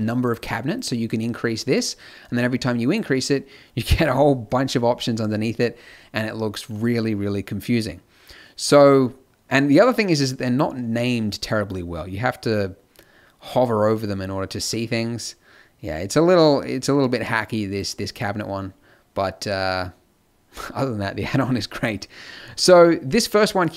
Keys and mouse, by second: 4.7-7.7 middle drag, 7.9 middle click, 9.5 click, 12.0-17.7 middle drag, 19.7-23.7 middle drag.